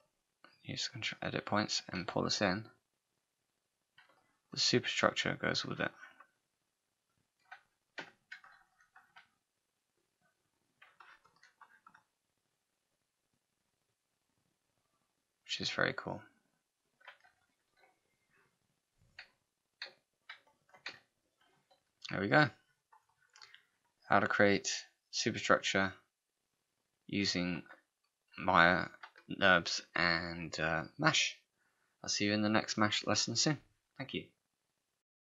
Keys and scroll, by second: 8.0 3, 20.9 z.